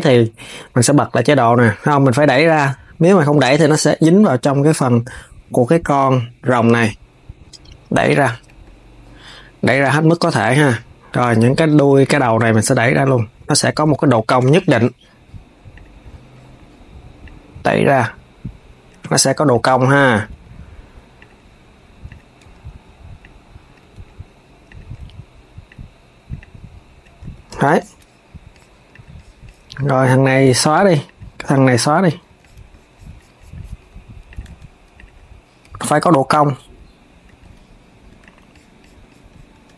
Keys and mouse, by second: 0.8-3.5 drag, 11.2 click, 12.5 click, 13.8 shift+click, 15.4-17.1 drag, 19.2 click, 19.4 KP_3, 19.9 g, 21.8 click, 22.1 KP_1, 22.9 click, 23.5 KP_3, 24.3 click, 24.6 KP_1, 25.3 click, 26.1 click, 26.9 Tab, 27.2 KP_3, 28.6 click, 29.8 click, 30.1 x, 30.7 click, 31.3 x, 31.8 s, 34.0 click, 34.1 Tab, 34.6 click, 35.3 KP_1, 36.1 click, 37.0 KP_3, 37.8 Tab, 37.9 click, 39.2 Tab.